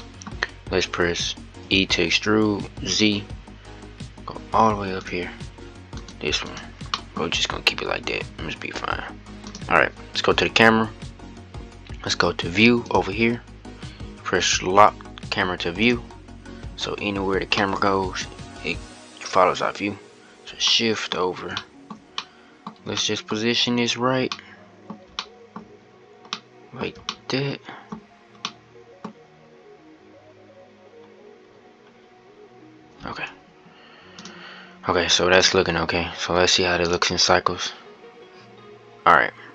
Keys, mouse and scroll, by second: 1.4 e, 5.7 middle click, 5.8 click, 6.3 click, 6.6-7.9 middle drag, 7.9-9.2 scroll down 1, 9.2 click, 15.6-17.4 drag, 17.4-23.1 middle drag, 23.1-24.0 scroll up 2, 24.0-25.4 middle drag, 25.4-26.0 scroll down 1, 26.0-29.9 middle drag, 29.9-31.7 scroll up 1, 31.7-32.8 scroll down 1, 33.9 click, 35.1 click, 36.8 click.